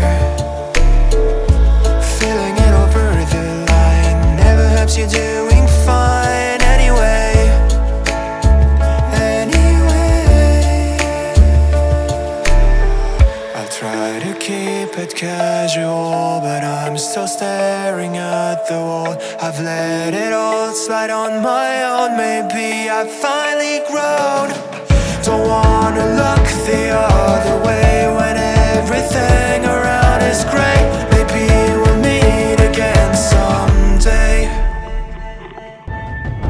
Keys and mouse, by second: 3.7 middle click, 4.4 shift+middle click, 5.7-6.3 drag, 5.7-6.3 right drag, 7.0 click, 7.0 right click, 8.5-10.9 middle drag, 11.1 shift+middle drag, 11.7 middle click, 13.3 shift+middle click, 13.6 Tab, 15.4 shift+middle click, 15.9 ctrl+middle click, 16.2 middle click, 17.7 shift+middle click, 18.3 ctrl+middle click, 19.5 middle click, 20.7-22.0 drag, 22.2 middle click, 23.5 middle click, 24.7-27.7 drag, 29.3-32.6 drag, 32.9 shift+middle click, 33.2 ctrl+middle click, 34.5 shift+middle click, 36.1 1.